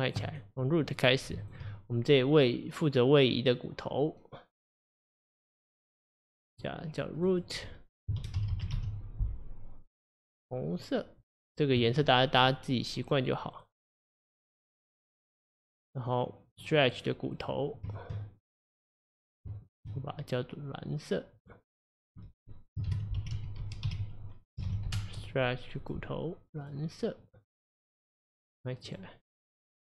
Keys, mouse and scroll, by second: 0.9 click, 1.4 shift+click, 6.6-7.3 drag, 7.3-8.5 drag, 8.5 o, 10.3-13.6 drag, 15.1 click, 16.6 click, 17.4 click, 19.0-19.7 drag, 21.4-25.1 drag, 25.8-29.0 drag, 29.2 click, 29.7 click.